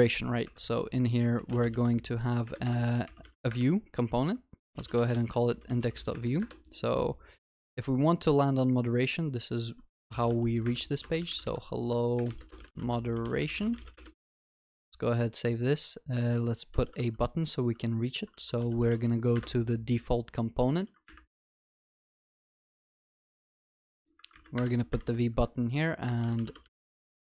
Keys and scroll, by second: 0.5 alt+Insert, 10.3 Tab, 14.2 ctrl+s, 19.3 ctrl+shift+n, 24.6 Return.